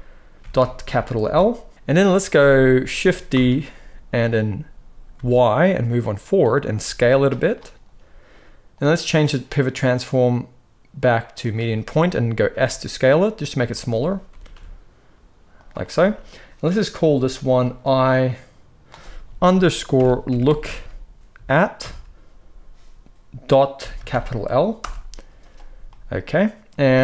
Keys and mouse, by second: 3.2 shift+d, 6.3-8.6 middle drag, 6.7 s, 8.6-13.5 drag, 12.4 s, 13.5-17.5 shift+middle drag, 14.2 g, 17.5-27.0 drag, 20.5 o.